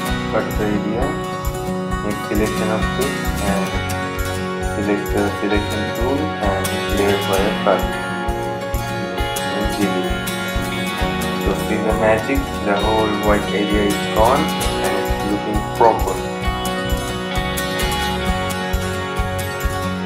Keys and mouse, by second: 0.9 right click, 2.6 click, 6.9 click, 7.5 right click, 9.7 click, 14.2 click, 17.7 typing, 19.0-19.8 typing.